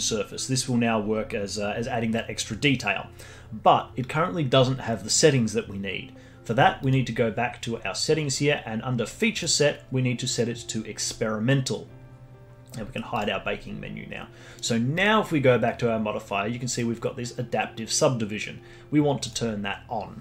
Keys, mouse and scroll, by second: 6.8 click, 9.3-12.3 drag, 13.1-15.0 drag, 19.4 click.